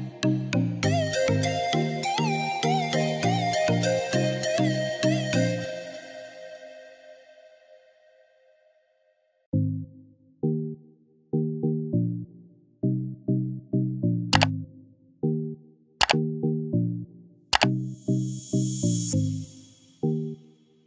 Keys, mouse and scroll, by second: 3.5 click, 6.4 click, 10.1-14.6 drag, 15.6 click, 15.6-20.8 drag.